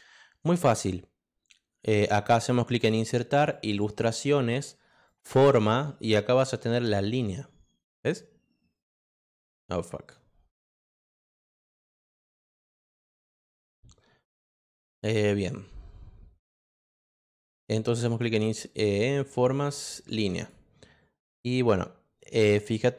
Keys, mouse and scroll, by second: 2.1 click, 3.5 click, 5.0 click, 12.9 click, 16.5 space, 18.0 click, 19.1 click, 20.3 click.